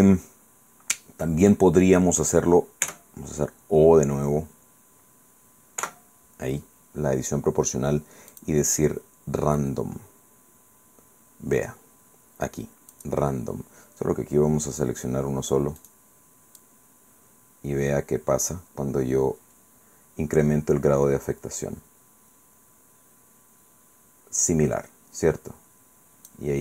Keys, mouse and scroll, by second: 2.9 Tab, 5.8 o, 8.4 click, 13.0 click, 15.8 right click, 16.6 click, 17.3 scroll down 2, 18.1-19.2 scroll down 6, 20.0 scroll down 2.